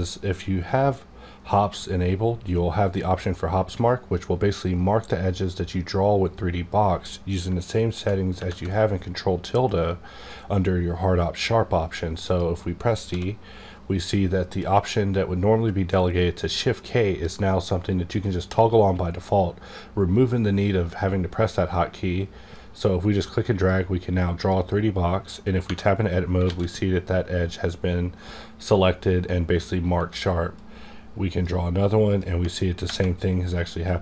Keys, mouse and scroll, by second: 7.7 click, 7.7 d, 8.4 ctrl+`, 12.2 click, 12.3 ctrl+`, 12.3 click, 13.0 d, 22.5-25.8 drag, 22.5 d, 25.6 Tab, 26.4 alt+a, 29.9 alt+a, 30.5-32.2 drag, 32.2 Right, 32.9 Right.